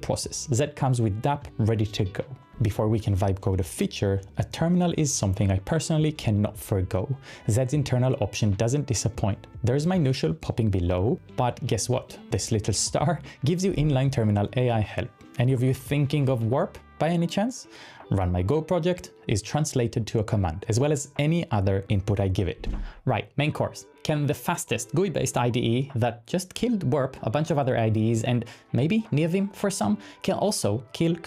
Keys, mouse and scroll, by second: 2.7 click, 5.3 typing, 5.5 Return, 9.9 click.